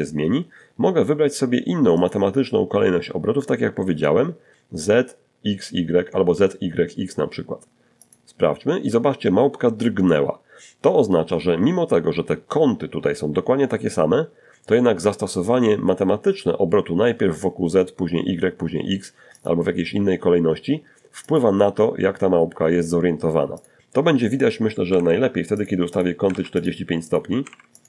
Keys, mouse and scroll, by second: 0.2 click, 6.2 click, 17.5 click, 19.5 click, 21.8 click, 23.1-26.2 typing, 23.8 click, 24.1 click, 24.8 click, 25.3 click, 26.0 click.